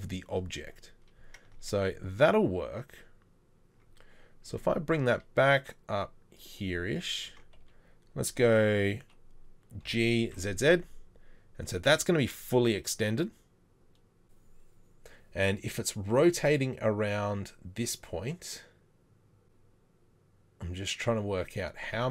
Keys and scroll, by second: 1.6 Tab, 4.5 g, 7.3 Tab, 9.9 Tab.